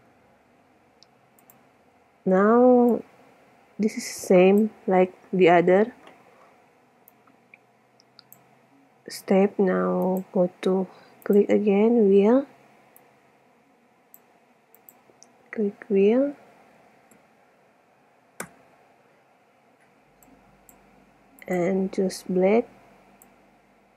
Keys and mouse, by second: 0.0 Escape, 1.5-1.8 right drag, 3.1-4.7 drag, 4.7-6.1 middle drag, 7.3-9.0 middle drag, 10.3-14.1 drag, 17.0 e, 20.4-23.3 drag, 23.5 middle click.